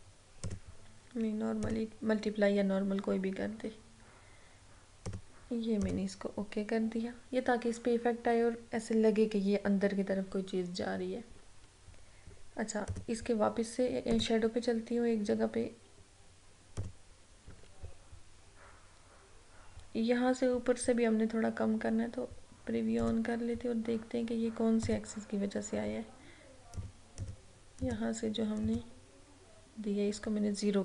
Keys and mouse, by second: 5.2 click, 13.0 click, 16.9 click, 23.1 click.